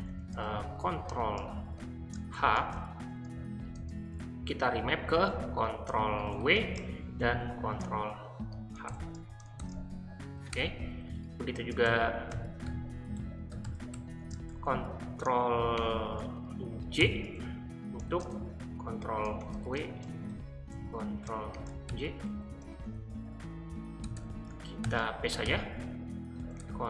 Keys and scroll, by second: 0.0-3.7 typing, 5.2-9.6 typing, 10.5 Return, 11.6-15.7 typing, 17.0-26.8 typing.